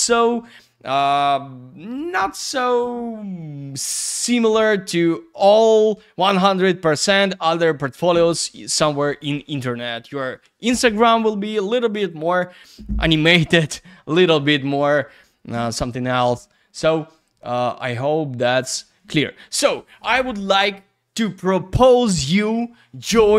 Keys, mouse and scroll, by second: 18.6 click.